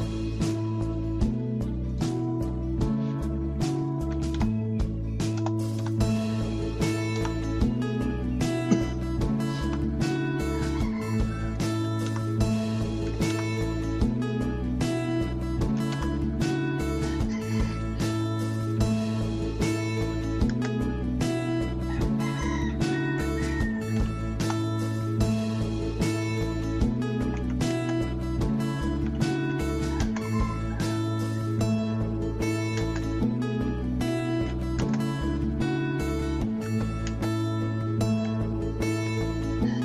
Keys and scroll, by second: 4.1-5.3 typing, 5.7 Return, 7.1 Return, 9.6 Return, 11.8 n, 12.0 Return, 13.0 n, 13.3 Return, 15.8 n, 15.9 Return, 18.7 Escape, 19.8-20.7 typing, 22.9-24.0 typing, 24.4 Return, 27.0-29.5 typing, 31.4-32.4 typing, 33.8-34.6 typing, 36.4-38.1 typing, 38.9 Escape.